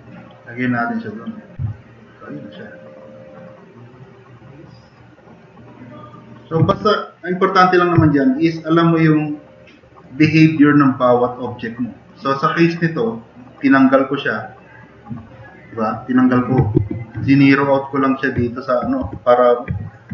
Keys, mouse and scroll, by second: 1.7-2.7 drag, 2.8-3.2 drag, 4.0-5.0 drag, 6.1-6.5 drag, 6.7 e, 7.2 click, 8.0 drag, 8.3 middle click, 8.3-8.6 scroll up 2, 8.8-9.9 drag, 16.8 alt+q, 18.5 click, 19.0 e.